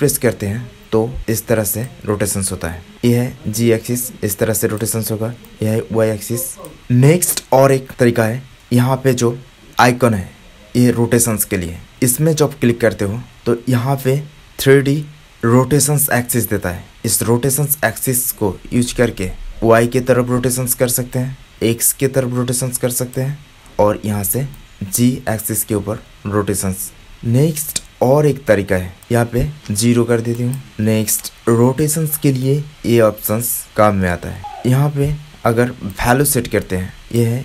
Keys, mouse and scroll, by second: 7.9-16.2 middle drag, 17.7 middle click, 29.5-35.8 middle drag.